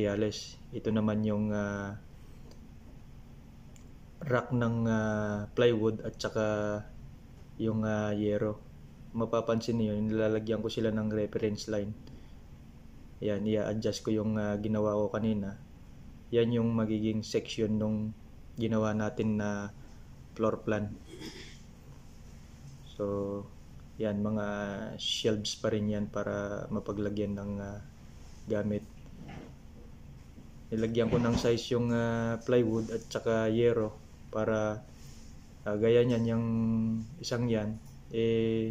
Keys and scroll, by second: 20.3 ctrl+c.